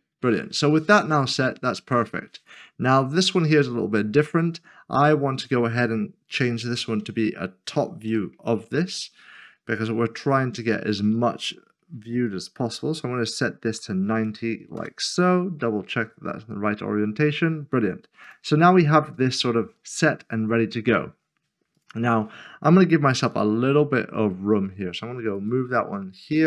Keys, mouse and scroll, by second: 7.0 typing, 8.1-8.8 typing, 13.6 typing, 14.8 Return, 15.6 middle click, 21.7 0, 25.3 g, 25.4 click.